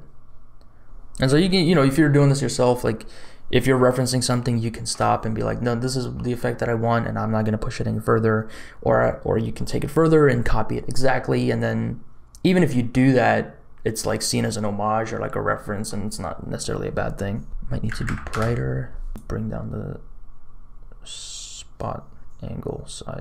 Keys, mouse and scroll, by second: 17.5 click, 19.1-23.2 drag.